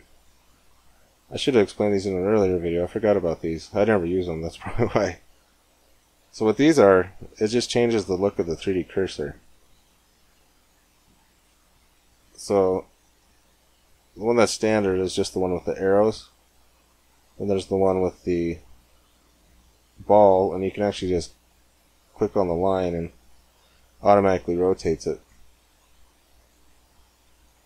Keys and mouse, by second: 2.6-4.6 drag, 3.4 middle click, 3.8 middle click, 4.3-6.1 middle drag, 6.1 Tab, 8.7 middle click, 12.0-15.5 drag, 15.5 middle click, 15.6 click, 16.6 middle click, 17.0-18.4 drag, 18.4 middle click, 18.9 click, 18.9-21.0 middle drag, 21.0 click, 22.5 click, 22.7 middle click, 24.5 click, 25.2 middle click, 25.5 middle click, 25.9 middle click, 26.1 middle click, 27.3-27.6 middle drag.